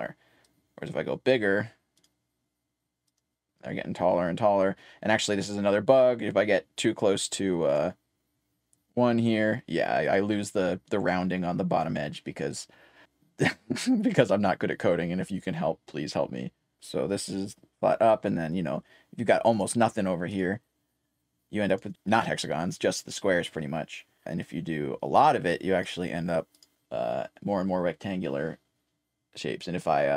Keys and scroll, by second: 0.1-1.3 typing, 5.7-7.5 typing, 24.4-25.9 typing.